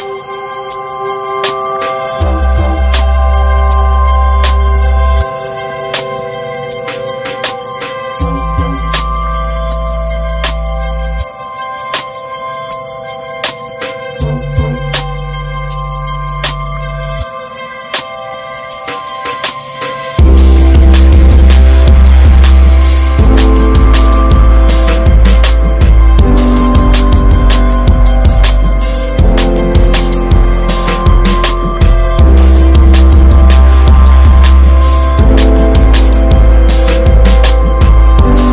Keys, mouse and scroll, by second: 2.0 alt+middle click, 2.5 shift+middle click, 3.3 s, 5.0 alt+middle click, 5.4 alt+z, 5.8 Tab, 6.2 alt+z, 6.7 shift+middle drag, 6.9 alt+z, 7.7 Tab, 8.5-11.0 scroll up 1, 12.6 shift+h, 13.2 Tab, 13.5 Tab, 14.0-14.8 scroll up 1, 14.8 2, 15.3 click, 17.4 2, 17.8 click, 20.2-21.7 drag, 21.7 s, 24.4 ctrl+z, 26.1 1, 26.3-27.5 drag, 29.7 click, 30.1 click, 31.2 click, 31.7 click, 32.5 click, 33.6 click, 34.0 click, 34.7 click, 36.5-38.4 drag.